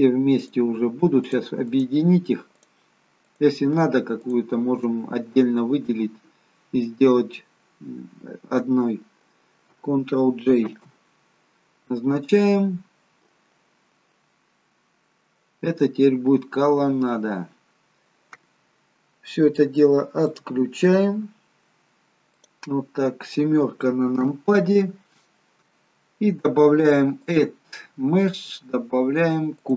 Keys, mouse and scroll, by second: 10.7 ctrl+j, 15.9-16.5 scroll up 3, 16.5 middle click, 17.4-19.4 scroll down 2, 20.4 click, 20.9 click, 24.2 KP_7, 25.7-27.3 scroll down 2, 27.3 click.